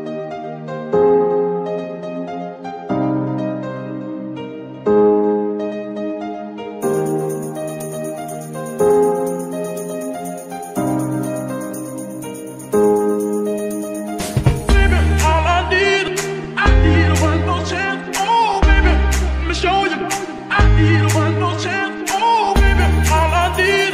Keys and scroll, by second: 19.7 KP_Decimal.